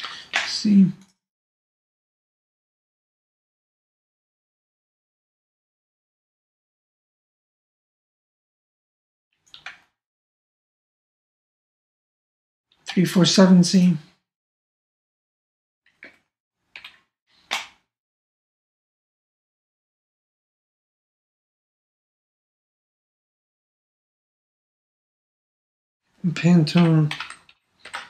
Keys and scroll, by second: 9.6 super+Tab, 12.9 super+Tab.